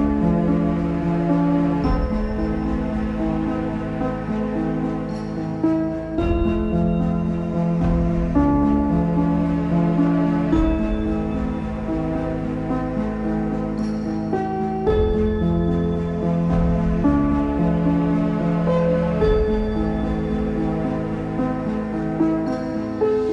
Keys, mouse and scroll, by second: 0.2 click, 1.4 ctrl+b, 2.7 Tab, 3.5 ctrl+a, 3.6 Tab, 4.1 ctrl+b, 6.5 Tab, 7.6 Tab, 9.5 click, 11.1 Tab, 12.5 click, 12.9 3, 13.5 click, 15.8 i, 17.9-18.9 right drag, 18.9 z, 19.1-20.4 middle drag, 20.4 right click, 20.7 Tab, 21.1 click, 21.6-23.3 middle drag.